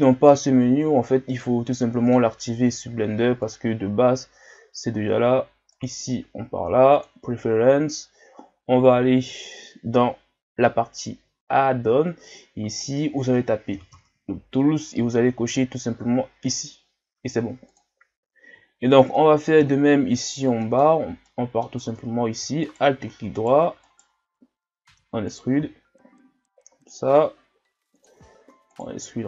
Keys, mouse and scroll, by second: 0.7 scroll down 1, 1.3-3.4 middle drag, 3.4-18.6 drag, 18.6 shift+scroll down 4, 19.1-19.7 middle drag, 19.8 shift+scroll down 2, 20.0 scroll up 2, 20.6-21.8 middle drag, 21.8 Tab, 22.6 alt+right click, 23.4 alt+right click, 23.8 alt+right click, 24.9 e, 25.5 s, 28.2 e, 29.0 s.